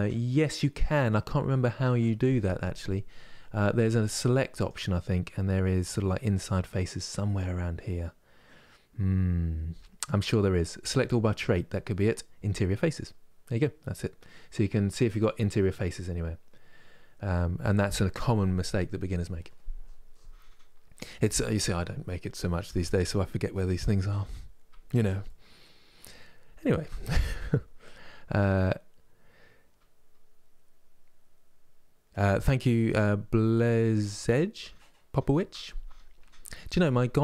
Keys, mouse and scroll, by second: 4.3-7.2 drag, 15.4-18.4 middle drag, 24.9-28.0 middle drag.